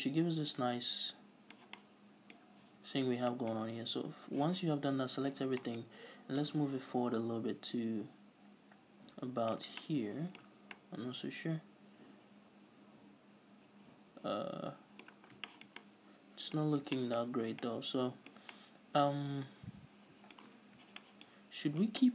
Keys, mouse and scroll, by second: 2.5 scroll up 2, 2.7 a, 4.4 z, 6.5-9.8 drag, 9.7 scroll down 2, 9.8-16.2 middle drag, 10.5 Tab, 10.6 scroll down 2, 15.3 scroll down 2, 16.4-22.1 middle drag, 16.6 scroll up 2, 17.3 scroll up 1, 20.6-21.0 scroll down 2.